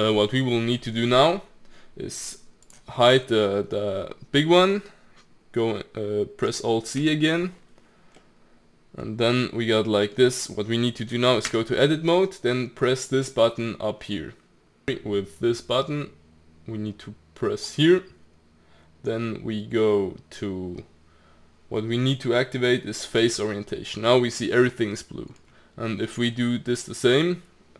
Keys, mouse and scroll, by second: 2.6 click, 3.0-6.6 middle drag, 7.0 alt+z, 8.2-11.3 middle drag, 11.5 Tab, 15.3-18.4 drag, 24.5-26.7 middle drag, 26.7 click.